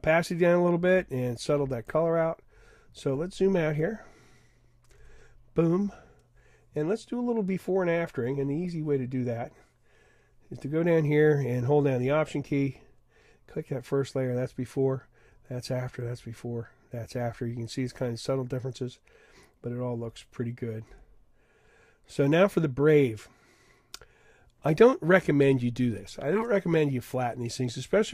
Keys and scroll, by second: 5.0 super+0.